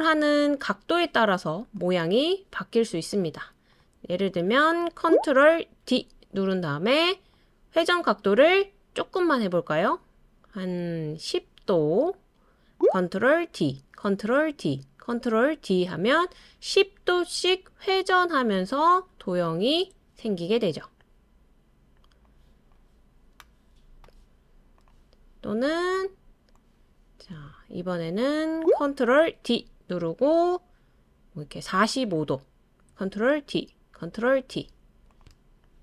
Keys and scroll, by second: 5.8 super+d, 13.5 super+d, 14.5 super+d, 15.5 super+d, 16.0 super+d, 16.3 super+d, 29.4 super+d, 33.4 super+d, 34.4 super+d.